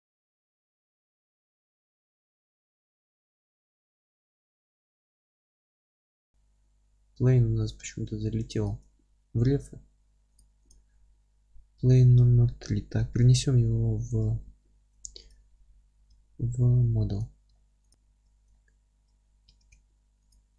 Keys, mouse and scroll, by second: 0.1 Tab, 0.4 Tab, 3.2 click, 14.6 alt+q, 17.2 m, 17.5-17.9 alt+middle drag, 17.9 click, 18.1 Tab, 18.5-19.1 alt+middle drag, 19.1-19.5 scroll up 1, 19.5 Tab, 20.3 q.